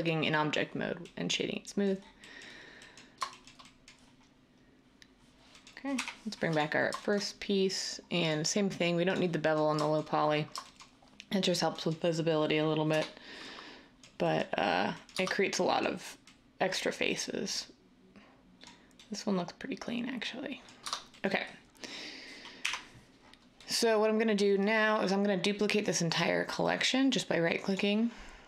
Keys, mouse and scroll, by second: 5.9 \, 15.1 Tab, 20.8 Tab, 22.6 \.